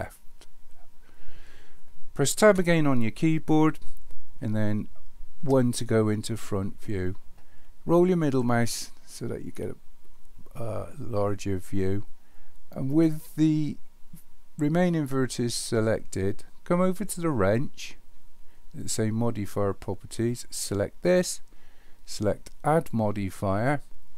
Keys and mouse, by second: 2.5 Tab, 5.4 KP_1, 20.6 click.